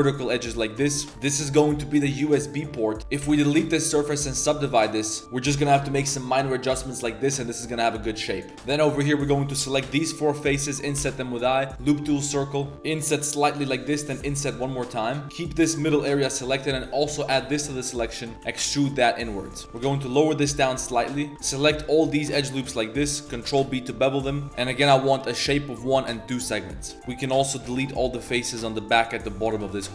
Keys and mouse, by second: 0.3 w, 1.1 s, 1.8 click, 3.0 ctrl+2, 3.0 ctrl+z, 3.2 x, 3.9 Tab, 4.2 ctrl+2, 4.5 ctrl+3, 5.1 click, 5.2 s, 5.5 s, 7.6 Tab, 8.5 3, 8.8 ctrl+shift+click, 9.9 i, 10.9 w, 12.1 shift+middle click, 12.6 shift+middle click, 12.9 i, 14.2 i, 15.2 s, 17.0 alt+shift+click, 17.9 click, 18.5 e, 19.7 g, 20.7 2, 22.0 alt+shift+click, 23.3 ctrl+b, 26.8 click, 26.9 x, 28.9 click, 29.4 z, 29.6 x.